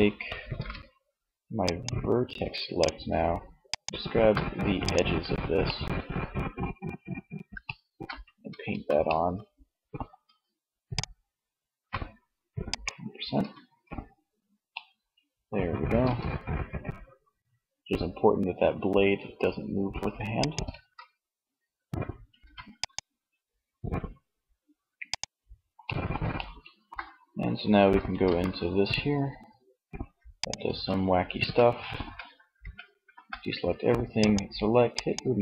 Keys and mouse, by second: 0.0 ctrl+Tab, 12.8 Tab, 15.1 r, 19.8 click, 20.0 ctrl+z, 21.3 ctrl+s, 25.8 middle click, 27.2 r, 29.5 click, 30.0 ctrl+z, 30.5 Tab, 31.0 a, 31.6 a, 32.0 a.